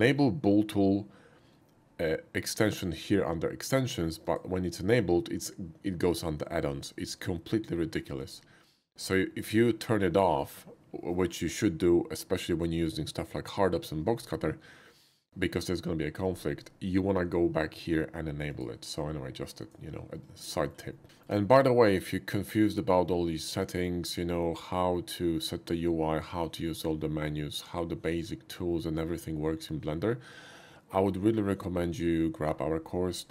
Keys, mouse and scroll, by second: 4.2-8.2 drag, 18.4 click, 19.6-20.2 drag, 20.2 shift+middle click, 20.5 shift+middle click, 20.8 shift+middle click.